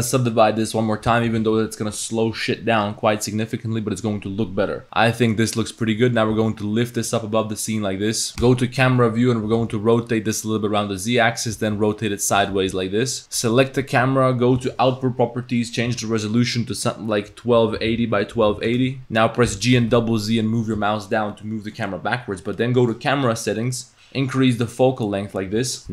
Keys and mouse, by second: 0.9 click, 1.9 Tab, 2.6 drag, 3.3 click, 4.8-5.3 drag, 4.8 a, 5.6 click, 5.7 click, 6.1 click, 6.3 g, 7.4 click, 8.3 ctrl+s, 8.4 KP_0, 9.5 r, 11.5 r, 12.5 g, 14.6 click, 15.6-18.7 drag, 19.0 g, 19.5 g, 24.2-25.8 drag.